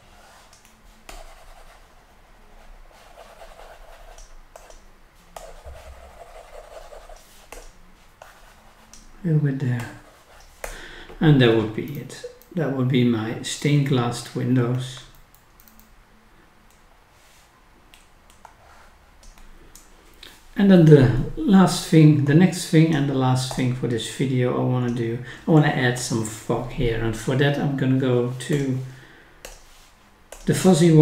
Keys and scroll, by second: 11.9-12.5 scroll down 1, 15.1 scroll up 1, 15.6 scroll down 1.